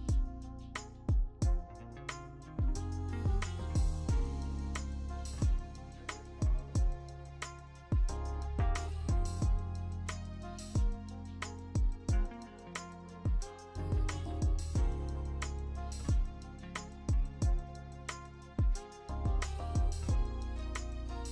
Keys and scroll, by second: 0.0-2.2 typing, 11.7 ctrl+t, 12.4 v, 14.9 v, 15.3 ctrl+d, 15.5 e, 17.3 ctrl+t, 18.5 ctrl+d, 18.7 ctrl+alt+f, 19.2 v, 19.7 3.